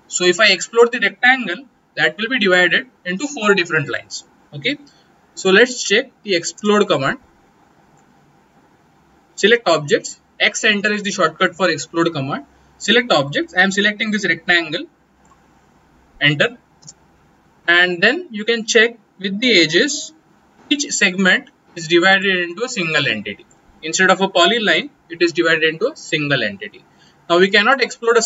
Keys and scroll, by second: 6.2 x, 6.5 space.